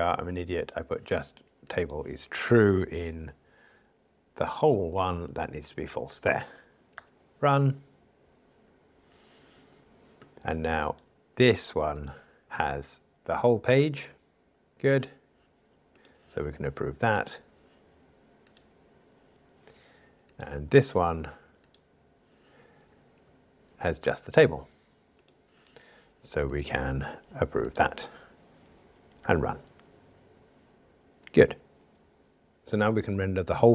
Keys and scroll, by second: 5.8 Escape, 6.9 ctrl+r, 19.1 super+F11, 28.2 super+F11, 29.3 ctrl+r.